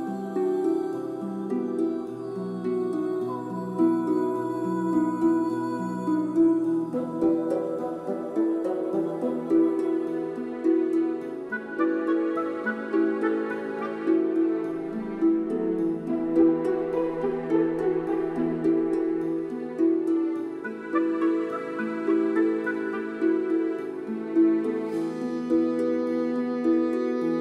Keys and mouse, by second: 2.2-4.9 drag, 5.2 click, 6.9 click, 9.5 click, 11.0 click, 13.3-15.3 drag, 15.4 g, 15.4 x, 15.6 y, 16.1 click, 16.3 click, 16.7 click, 17.2 z, 17.3 g, 17.4 x, 18.4-24.6 drag, 24.7 ctrl+b, 25.5 click.